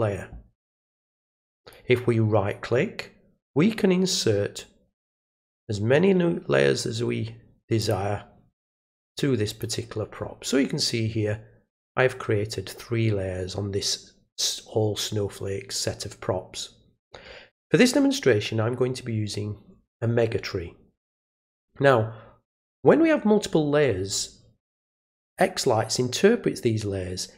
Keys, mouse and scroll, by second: 1.6 right click, 7.8 click, 8.7 right click, 9.5 click, 25.2 click.